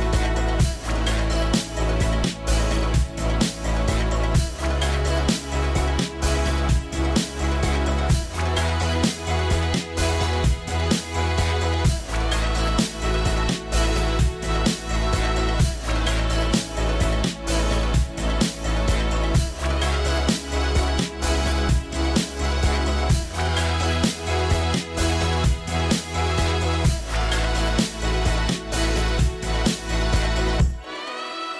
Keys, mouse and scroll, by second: 2.1-2.6 scroll up 1, 2.7 scroll down 1, 2.8 middle click, 8.2 middle click, 8.8-10.5 scroll down 1, 10.5 scroll down 1, 10.6 scroll up 1, 11.2 scroll up 1, 11.3-11.7 scroll down 1, 11.9 middle click, 12.5 scroll up 1, 19.6 scroll up 1, 19.6 middle click, 21.4-22.3 scroll up 1, 22.3 scroll up 1, 22.4 scroll down 1, 22.6 middle click, 24.5-25.7 scroll up 1, 25.7 middle click, 26.2-28.3 scroll down 1, 29.8 right click.